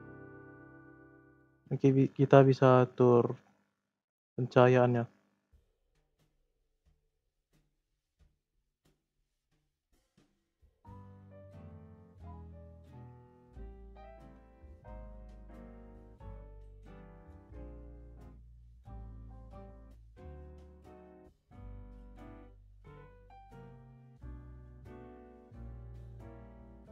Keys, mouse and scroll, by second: 1.6-4.6 drag, 10.5 click, 11.6 click, 15.2 scroll down 2, 15.4-16.0 middle drag, 16.0 click, 17.6 click.